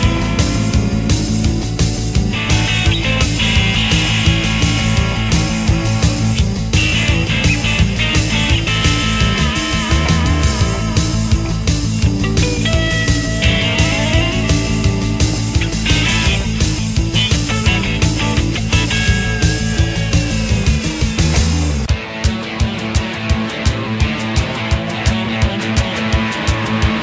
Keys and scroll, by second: 5.6 ctrl+KP_1, 7.1 g, 7.6 b, 9.9 g, 10.7 g, 11.4 w, 14.9 g, 16.0 ctrl+KP_1, 25.1 r, 26.4 w.